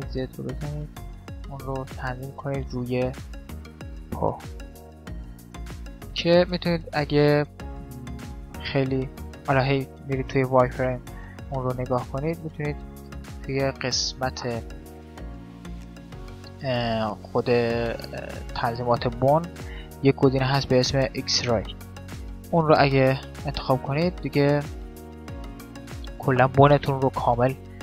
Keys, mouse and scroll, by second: 1.2 middle click, 3.2 click, 3.6 middle click, 3.8-4.8 drag, 4.8 middle click, 4.8 right click, 6.2-8.9 middle drag, 9.0-10.6 middle drag, 9.4 z, 10.7-14.3 middle drag, 11.6 z, 16.0-17.7 drag, 17.8 click, 22.2-24.1 drag, 24.1-25.8 middle drag, 27.0-27.8 middle drag.